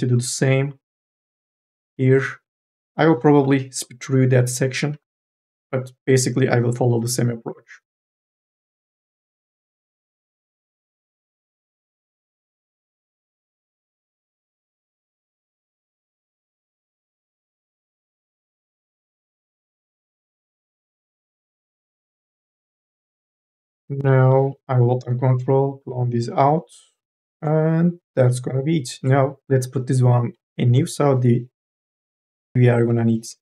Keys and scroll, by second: 2.4 1, 2.7 3, 4.8 1, 7.4 1, 9.0 2, 9.1 e, 9.2 m, 11.9 1, 14.9 ctrl+z, 14.9 e, 15.1 m, 15.2 e, 15.8 ctrl+z, 22.6 2, 22.7 e, 23.7 m, 24.2 o, 32.7 q.